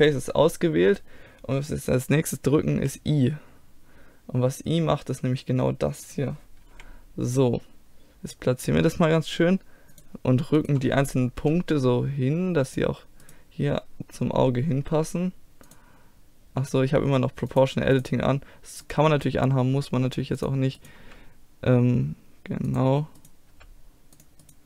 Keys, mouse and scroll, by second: 2.8 i, 6.8 KP_1, 8.6-10.0 middle drag, 10.0-11.8 drag, 10.6-11.8 right drag, 11.6 g, 11.8 middle click, 12.0 click, 12.5 middle click, 13.3-15.2 drag, 15.0 g, 15.2 middle click, 17.5-22.3 drag, 18.9 right click, 19.1 g, 21.1 g, 22.3 right click, 23.2-24.5 right drag, 23.6 g.